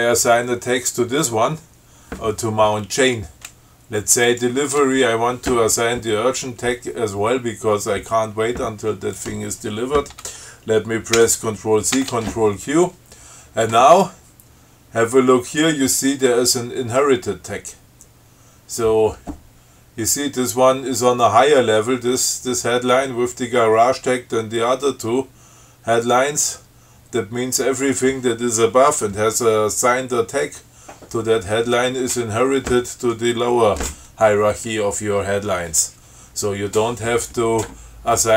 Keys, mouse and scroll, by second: 4.4 click, 11.3 ctrl+c, 12.1 ctrl+q.